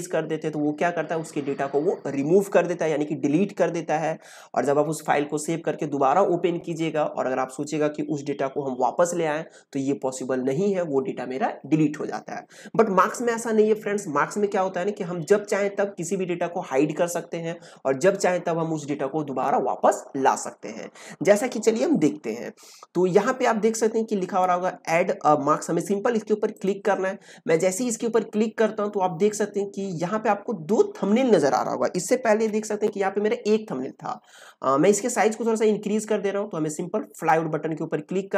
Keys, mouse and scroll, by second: 26.5 click, 32.2 ctrl+z, 37.1 click.